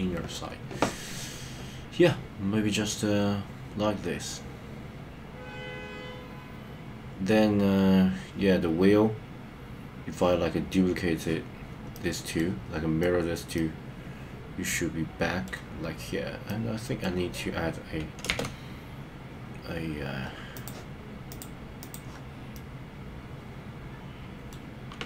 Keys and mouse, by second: 11.9 middle click, 12.9 middle click, 13.5-15.4 middle drag, 16.4 middle click, 18.2 shift+a, 21.4 click, 22.5-25.0 middle drag.